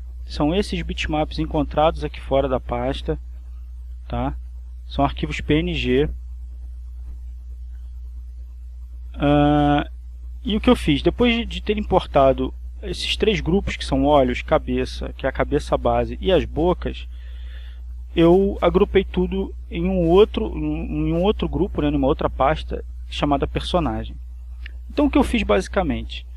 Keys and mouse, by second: 1.1 click, 2.1 click, 3.7 click, 4.6 click, 6.6-9.3 drag, 10.4 click, 18.0 click, 23.3 click.